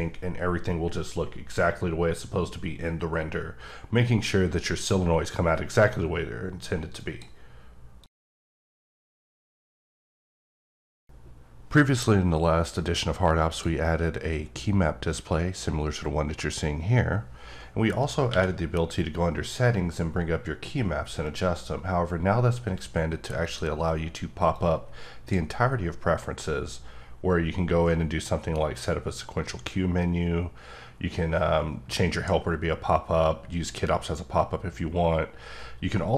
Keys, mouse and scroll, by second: 7.0 click, 18.3 q, 23.4 click, 24.5 click.